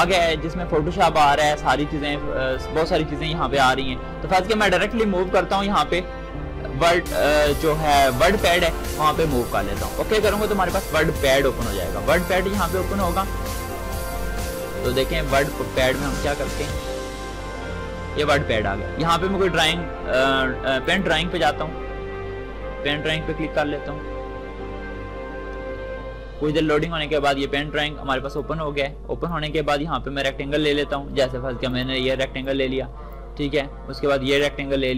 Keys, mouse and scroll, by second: 2.2-8.2 drag, 20.5 click, 28.1-31.4 drag, 31.4-34.9 drag.